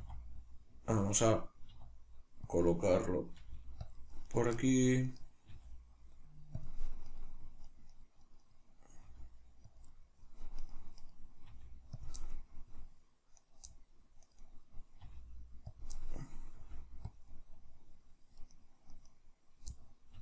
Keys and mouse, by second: 1.1 click, 1.1-2.6 middle drag, 1.7 r, 2.6 click, 2.7-3.9 middle drag, 3.4 g, 3.9 click, 4.3 right click, 5.1 right click, 5.5 g, 6.7 click, 7.1 right click, 7.7 right click, 7.9 right click, 8.3 right click, 8.4 right click, 9.1 g, 9.8 click, 9.9 middle click, 10.6 right click, 11.0 right click, 11.5 g, 12.1 click, 12.3-13.4 middle drag, 13.4 right click, 14.3 right click, 14.4 right click, 15.1 g, 15.8 click, 15.9 middle click, 16.5 middle click, 16.5 g, 17.2 click, 17.3-18.5 middle drag, 18.5 right click, 18.9 right click, 19.1 right click, 19.7-20.2 middle drag, 20.1 g.